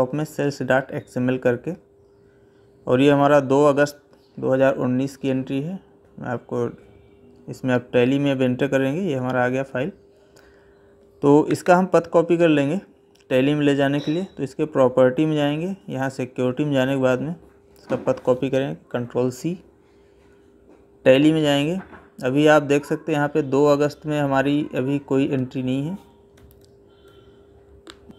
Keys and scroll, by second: 18.7 ctrl+c, 26.1 Escape.